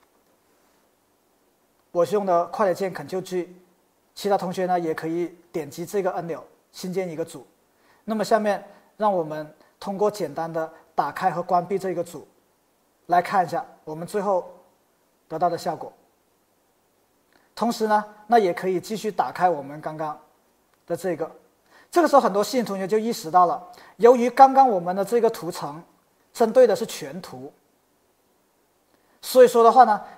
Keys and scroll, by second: 0.2 super+g.